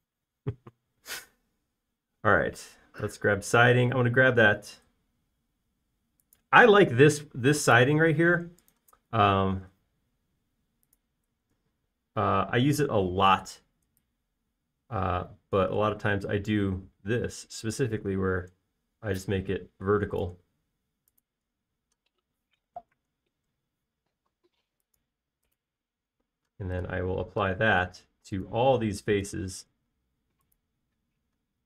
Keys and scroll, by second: 23.9-24.7 typing.